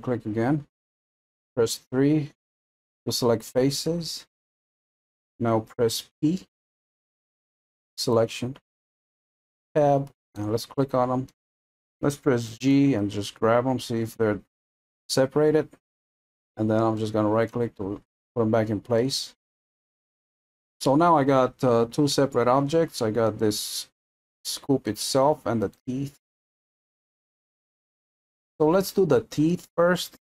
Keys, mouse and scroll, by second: 2.0 3, 2.7-8.1 middle drag, 8.1 p, 9.7 Tab, 10.3-10.8 drag, 10.8 middle click, 11.3 middle click, 11.6 scroll down 2, 12.5 g, 17.0-17.7 middle drag, 17.7-18.2 scroll down 2, 18.2-20.1 middle drag, 20.1-20.7 scroll down 2, 20.7-23.3 middle drag, 23.3 click, 24.2 scroll down 1, 24.2-25.6 middle drag, 25.6 click, 26.6-27.4 middle drag, 27.4-28.2 scroll up 2.